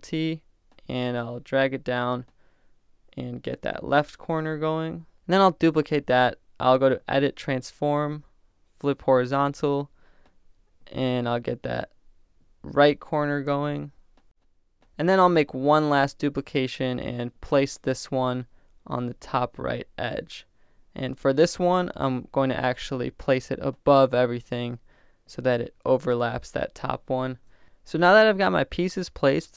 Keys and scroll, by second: 5.6 super+j, 13.3 super+t, 22.7 Return, 27.3 super+t.